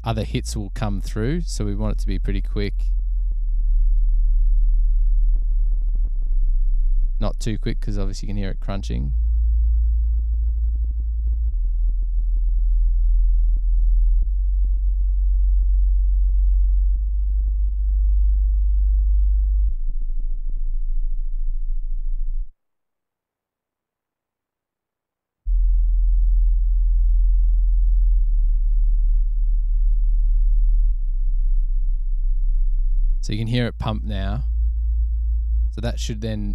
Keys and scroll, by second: 23.8 space, 24.0 space.